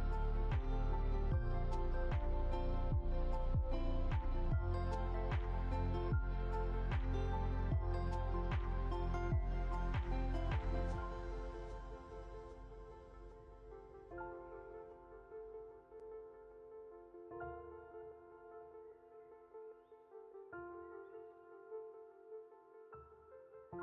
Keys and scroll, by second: 8.5 ctrl+0.